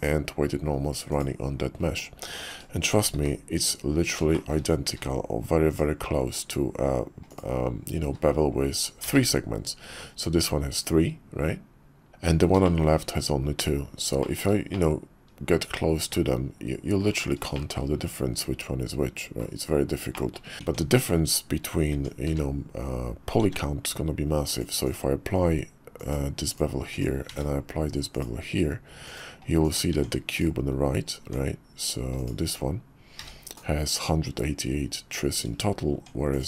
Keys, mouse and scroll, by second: 2.9 shift+d, 4.3 shift+drag, 4.8 q, 8.0 q, 12.6 shift+middle click, 14.2 shift+middle click, 14.7-17.1 middle drag, 17.5 shift+middle drag, 20.1 shift+middle drag, 20.6 Tab, 21.9 Tab, 22.3 q, 23.4 ctrl+`, 26.9 click, 27.3 ctrl+`, 29.9 Tab, 30.4 click, 31.2 Tab, 32.4 Tab, 33.2 a, 35.9 Tab, 36.4 click.